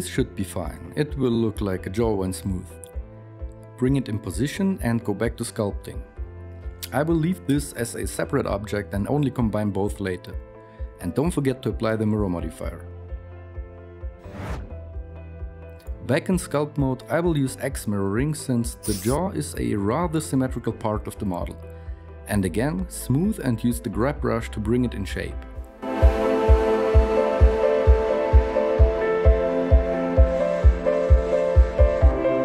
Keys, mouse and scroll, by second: 0.6 Tab, 0.6-2.7 typing, 3.8-6.4 typing, 7.8 s, 10.8 KP_3, 11.0 ctrl+a.